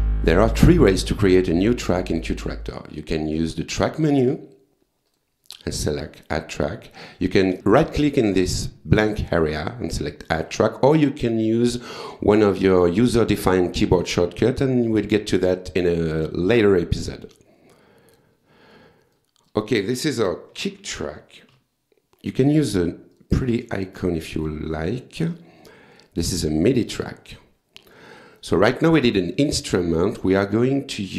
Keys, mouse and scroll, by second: 5.1 click, 6.6 click, 9.2 right click, 10.4 click, 17.2 right click, 18.1 click, 19.1 click, 20.3-22.0 typing, 23.2 click, 24.0 click, 25.9 click, 27.1 click, 28.4 click, 29.4 right click, 30.3 click.